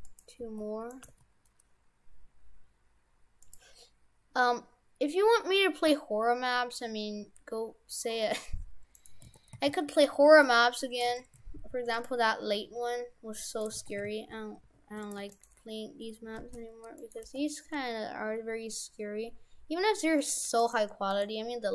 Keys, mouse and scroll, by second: 0.5 g, 1.1 g, 5.9 middle click, 9.0 right click, 9.3 shift+f, 10.5 Tab, 11.1 shift+f, 12.4 Tab, 12.7 Tab, 13.5 right click, 13.7 shift+f, 15.2 Tab, 15.3 right click, 16.3 g, 17.2 g, 20.7 right click, 21.1 right click.